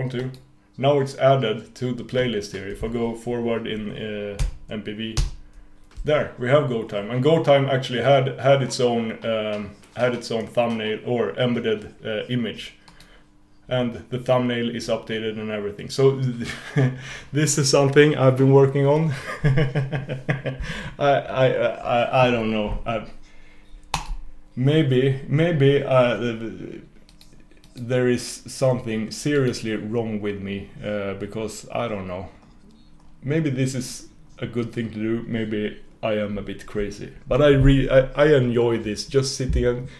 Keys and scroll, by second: 4.5 super+].